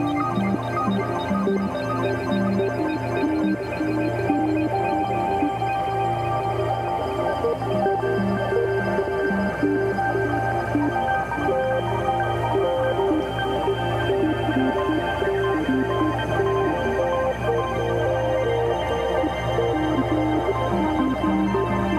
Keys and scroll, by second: 0.1 space, 0.8 space, 2.2-4.1 typing, 5.2 [, 5.6 ], 5.9 [, 6.5 ], 7.7 [, 8.3 ], 10.5 space, 11.2 space, 12.6 2, 13.8 space, 16.4 ], 16.8 [, 18.7 v, 19.0 space.